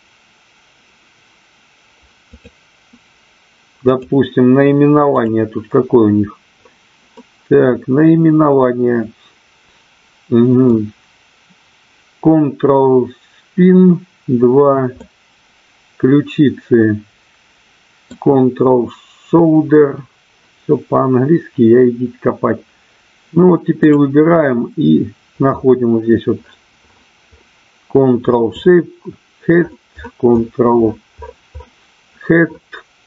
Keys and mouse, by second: 2.3 click, 4.0 click, 5.3 click, 7.2-10.6 middle drag, 15.0-18.1 middle drag.